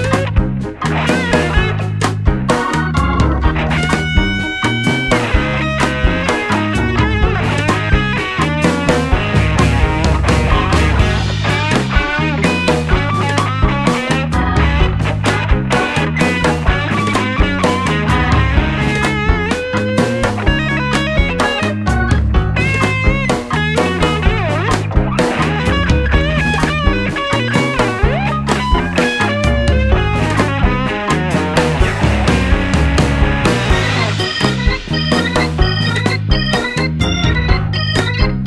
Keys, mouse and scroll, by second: 4.3 KP_7, 4.9 middle click, 5.4-6.8 middle drag, 6.5 s, 7.0 middle click, 9.6-11.9 middle drag, 11.9-13.9 right drag, 13.3 w, 17.8-19.7 middle drag, 19.6 click, 20.2 middle click, 21.1 KP_1, 22.5 s, 23.4-27.1 middle drag, 26.6 KP_7, 26.9 z, 27.3-30.8 middle drag, 28.7 z, 30.8 click, 33.2-34.2 right drag, 33.6-38.4 middle drag.